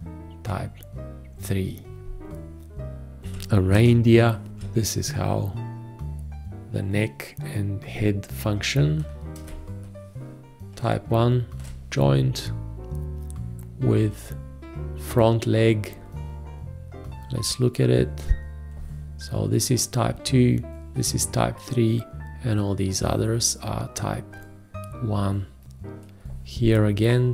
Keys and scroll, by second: 3.2 ctrl+a, 4.5 ctrl+a.